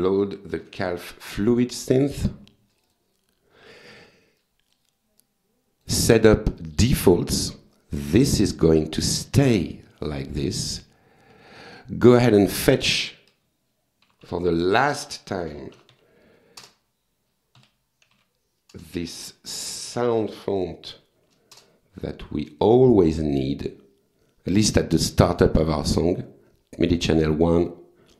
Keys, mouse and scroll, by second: 0.4-1.7 typing, 2.7 click, 4.4 click, 5.2 click, 6.5 click, 7.3 click, 10.8 click, 12.6 click, 13.1 click, 13.8-18.7 typing, 14.9 Return, 16.6 Return, 19.6 Return, 20.9 f, 21.5 Return, 23.0 click, 27.7 click.